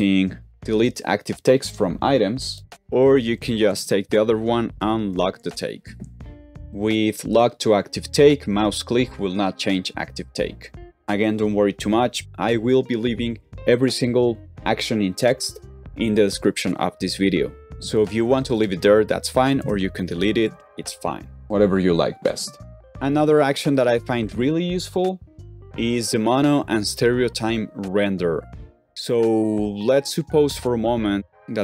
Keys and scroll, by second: 0.5 shift+BackSpace, 3.6 typing, 5.0 alt+t, 19.5 shift+BackSpace, 20.2 super+z, 22.8 typing.